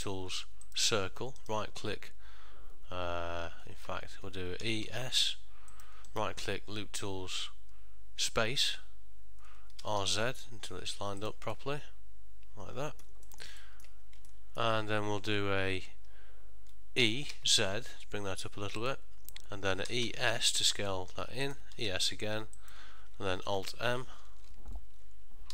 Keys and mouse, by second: 6.2 right click, 11.7 middle click, 13.4 ctrl+middle click, 13.7 shift+middle click, 14.4 middle click, 17.1 e, 20.0 e.